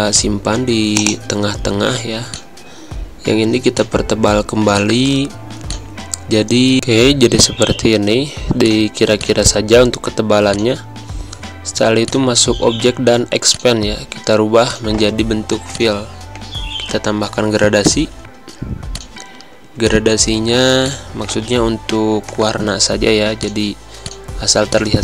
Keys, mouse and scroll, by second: 17.8 click, 23.4 click.